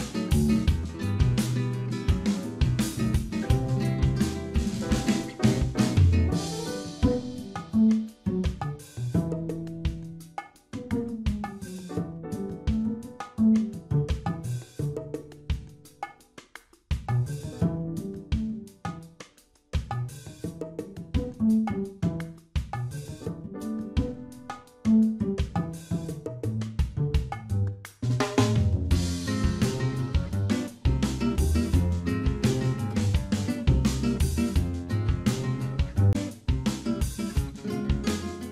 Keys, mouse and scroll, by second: 0.3 middle click, 1.2 click, 2.4 click, 4.0 x, 6.5 middle click, 7.3 scroll down 1, 8.7 KP_Divide, 8.7 scroll down 2, 10.0 click, 10.9 KP_Decimal, 11.3 middle click, 11.6-12.3 scroll up 1, 12.3 middle click, 12.3-12.8 scroll up 2, 12.8 a, 14.1 ctrl+e, 18.5 shift+middle click, 20.5 click, 22.5 click, 26.7 n, 27.5 middle click, 28.9 ctrl+r, 36.5 ctrl+r, 37.4 middle click, 38.1 Tab.